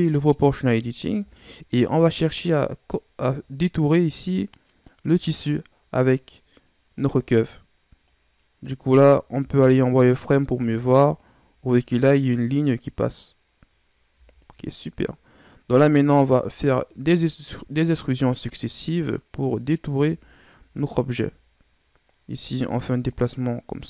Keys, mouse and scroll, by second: 1.3-1.6 scroll down 1, 1.6-2.8 scroll up 1, 2.8 right click, 8.0 right click, 9.3 z, 10.5-13.5 drag, 14.1 z, 16.3 right click, 18.9 Right, 19.8 z, 20.7 right click, 22.8 right click.